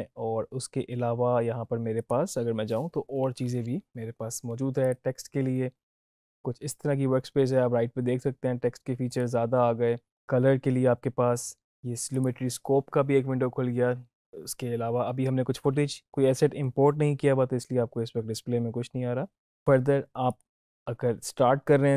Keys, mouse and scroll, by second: 2.0 click, 4.8 click, 9.1 click, 12.1 click, 20.2 click.